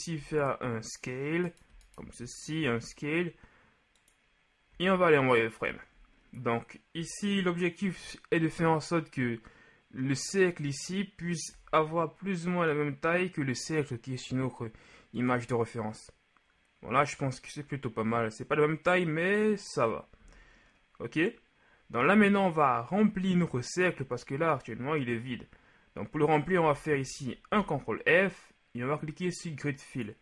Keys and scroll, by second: 2.6 alt+s, 4.6 z, 11.5 s, 20.1 z, 26.7 KP_1, 27.5 f.